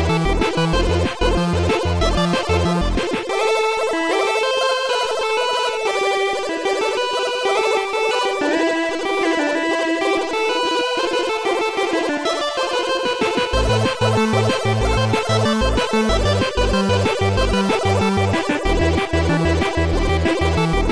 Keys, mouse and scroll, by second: 0.3 click, 3.0 right click, 3.7 right click, 4.6 click, 5.8 click, 7.6 right click, 9.2 click, 10.8 click, 11.4 click, 12.9 click, 14.7 click, 15.6 click, 16.9 click, 18.2 shift+click, 19.2 shift+click, 19.7 shift+click.